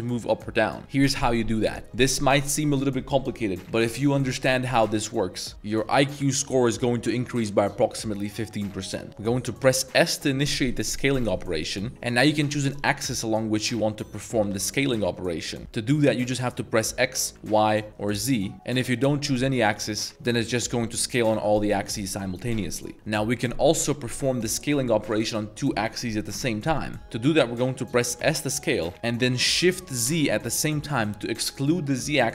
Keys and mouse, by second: 1.0 click, 2.1 middle click, 9.3 middle click, 9.6 s, 11.9 x, 14.5 y, 15.6 s, 15.8 x, 17.3 y, 18.2 z, 18.5 s, 27.0 s, 28.2 s, 30.2 shift+z.